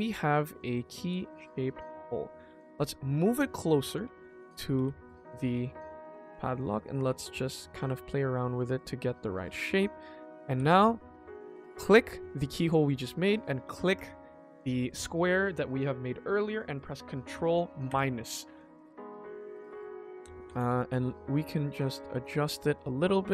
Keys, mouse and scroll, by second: 0.0 middle click, 0.8 s, 2.4 g, 4.0 KP_1, 4.3-4.7 scroll up 2, 4.7 g, 5.4 s, 6.1 g, 7.9 scroll up 1, 8.1 middle click, 8.5 scroll down 2, 8.8 shift+middle click, 9.2 scroll up 2, 9.4 ctrl+s, 9.7 middle click, 10.1 shift+middle click, 10.4 g, 13.9 shift+click, 17.8 ctrl+KP_Subtract, 18.6 scroll up 1, 18.6 middle click, 19.5 shift+middle click, 20.3 g, 22.1 middle click, 22.5 scroll down 1, 22.8 shift+middle click, 23.2 click.